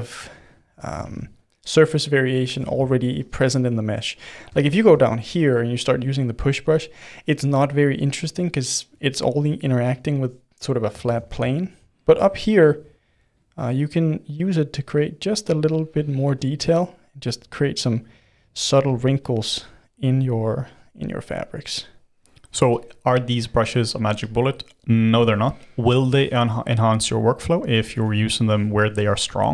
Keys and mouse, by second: 0.0 click, 1.0 ctrl+z, 1.4-2.6 drag, 2.6 ctrl+z, 2.7 ctrl+z, 3.1 f, 3.6 click, 4.2-5.4 middle drag, 5.4-6.6 drag, 6.6-11.0 middle drag, 11.0 ctrl+z, 11.4-13.4 shift+middle drag, 13.4-15.2 drag, 15.2 middle click, 15.5-16.9 drag, 16.9 middle click, 17.5-20.6 drag, 20.6-21.8 middle drag, 21.8 click, 22.3 middle click, 22.7-25.0 drag, 25.0-27.0 ctrl+middle drag, 27.0 g, 27.9 f.